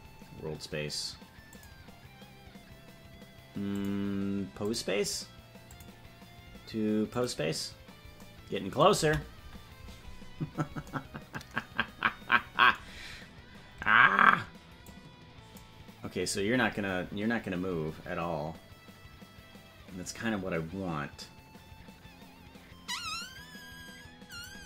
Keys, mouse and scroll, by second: 3.7-4.8 drag, 5.7-7.3 drag, 9.4 KP_Decimal, 10.3-10.7 scroll down 10, 14.8-16.2 drag, 24.3-24.6 drag.